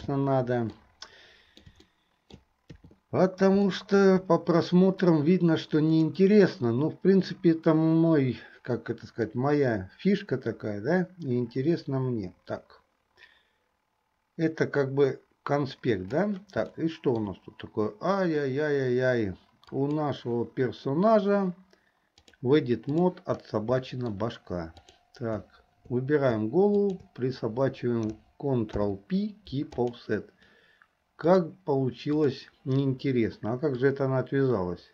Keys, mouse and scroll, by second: 0.0 n, 0.9-1.8 middle drag, 2.0 middle click, 2.9 KP_3, 3.8 middle click, 6.0 click, 9.4-16.3 drag, 16.9-17.4 shift+middle drag, 19.8 click, 22.2-23.2 drag, 24.0 shift+middle click, 25.0 click, 26.8 shift+click, 28.8 ctrl+p, 31.3-32.5 drag, 34.0-34.9 drag.